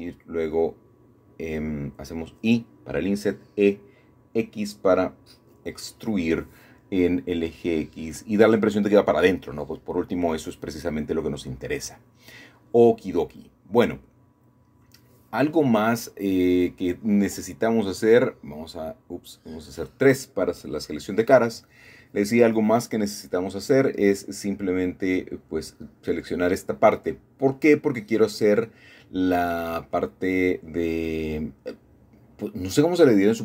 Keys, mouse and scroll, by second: 0.0 scroll up 2, 0.2-1.3 scroll down 2, 0.7 middle click, 2.7-3.7 scroll down 3, 4.1-7.3 middle drag, 9.2 middle click, 10.8 scroll up 2, 11.0-11.4 scroll down 4, 11.4 scroll up 2, 11.5 scroll down 2, 11.6-12.0 scroll up 2, 13.1 typing, 14.1-15.6 middle drag, 16.3 c, 16.8-19.0 drag, 18.0 Escape, 18.1 Escape, 18.3 Escape, 18.8 3, 19.6 c, 23.0 Escape, 23.2 Escape, 23.3 Escape, 24.4-24.9 scroll down 1, 24.7 middle click, 26.7 middle click, 27.3 middle click, 29.3 shift+d, 31.1 g, 31.6 x.